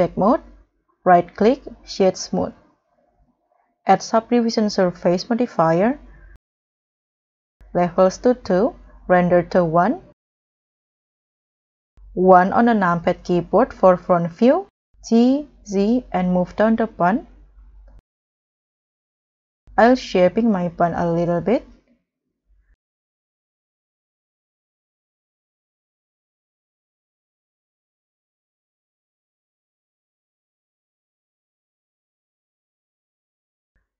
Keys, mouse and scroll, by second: 0.6 scroll down 2, 1.0 right click, 2.2 scroll down 2, 2.6 middle click, 6.4-7.6 scroll up 2, 10.3 scroll up 3, 10.7 middle click, 12.1 1, 15.0 g, 15.5 z, 18.0 scroll down 2, 18.6-19.0 scroll down 4, 19.2 scroll up 1, 19.9 s, 22.4 scroll up 3, 22.6 scroll down 4, 22.6 middle click, 22.8-23.5 scroll up 3, 23.1 0, 23.6 middle click, 23.7 scroll down 1, 24.2-24.8 scroll up 7, 24.3 middle click, 25.7-27.3 typing, 27.7 scroll down 3, 27.7 middle click, 28.1 middle click, 28.2-28.6 scroll down 3, 28.3 KP_0, 28.6 scroll up 3, 30.3 s, 30.5 scroll up 1, 31.1 ctrl+r, 31.4 right click, 31.6 s, 32.4 double click, 32.8 scroll down 2, 33.2 g, 33.7-33.9 scroll down 4.